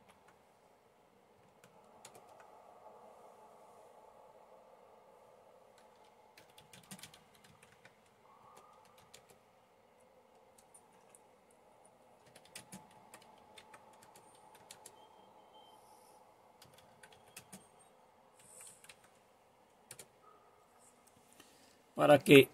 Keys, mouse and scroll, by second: 2.0 super+Return, 6.1-9.6 typing, 12.0-18.8 typing, 20.0 typing.